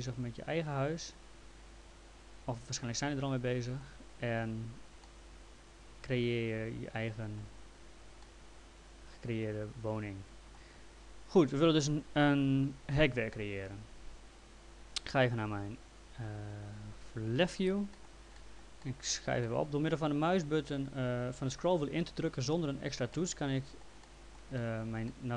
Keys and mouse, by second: 5.0 middle click, 8.2 middle click, 17.4 l, 18.0 middle click, 23.1 middle click.